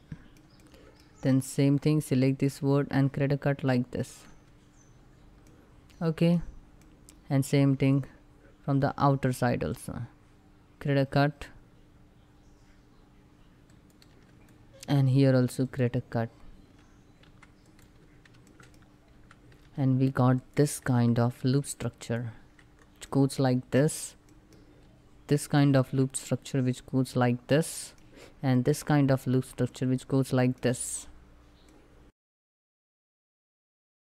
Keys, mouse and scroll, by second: 19.0 c, 19.3 c, 20.0 alt+click, 20.8 3, 21.2 alt+click, 22.3 scroll down 1, 22.7 middle click, 25.1 alt+click, 25.9-28.2 middle drag, 28.2 alt+click, 29.0 scroll down 1, 29.3 middle click, 30.3 scroll up 1, 31.3 middle click, 32.2 ctrl+r, 32.2 ctrl+click, 33.1 click, 33.2 middle click, 33.4 scroll up 1, 33.7 scroll down 1, 33.7 shift+middle click.